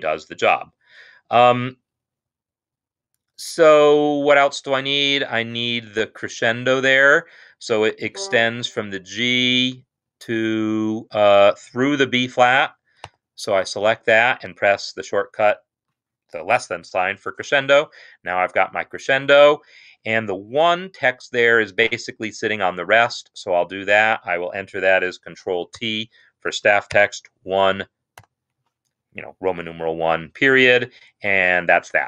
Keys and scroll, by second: 6.5 Escape, 9.0 shift+Right, 9.5 shift+Right, 13.0 shift+,, 19.8 Escape, 25.8 ctrl+t, 26.9 shift+i, 28.1 ., 30.5 Escape.